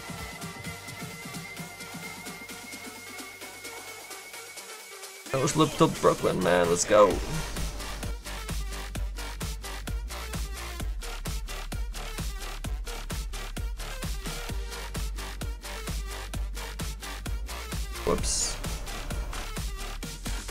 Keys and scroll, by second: 17.0 ctrl+z, 17.2 ctrl+z, 19.3 ctrl+z.